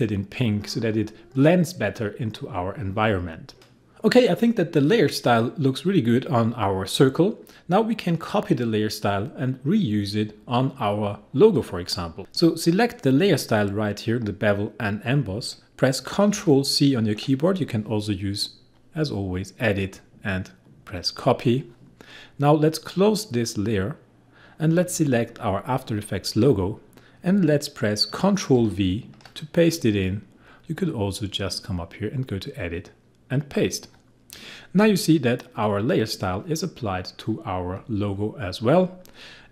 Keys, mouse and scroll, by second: 13.0 click, 16.0 click, 16.3 ctrl+c, 18.7 click, 21.0 click, 23.5 click, 28.1 click, 28.6 ctrl+v, 32.0 click, 34.5 click.